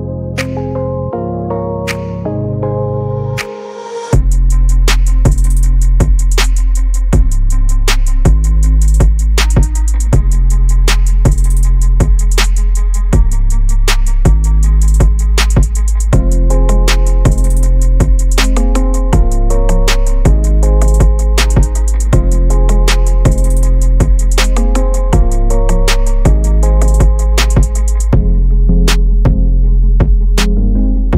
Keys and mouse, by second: 3.0-4.5 middle drag, 4.9 KP_7, 5.8 shift+z, 6.8 click, 9.4 ctrl+r, 15.0 ctrl+r, 19.0 shift+middle click, 20.4 ctrl+r, 23.9 click, 25.1 shift+middle click, 26.4 ctrl+b.